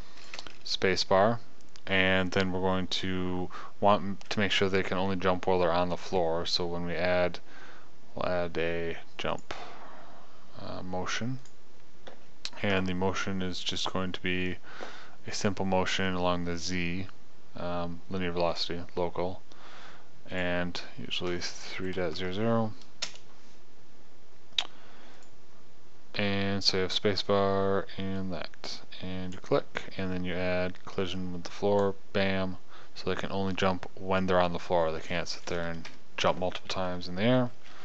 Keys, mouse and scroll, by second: 0.0 click, 9.9-11.9 drag, 30.6-31.6 drag, 33.5 click, 33.8 middle click, 36.2 KP_0.